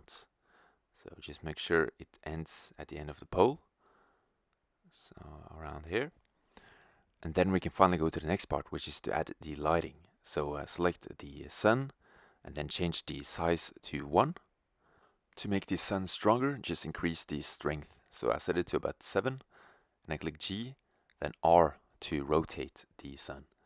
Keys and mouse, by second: 2.0-4.5 drag, 4.5-4.8 middle drag, 6.3-8.0 middle drag, 8.0-9.8 right drag, 9.8-13.6 drag, 14.8-17.3 drag, 18.7 g, 20.3 r, 20.9-23.4 drag.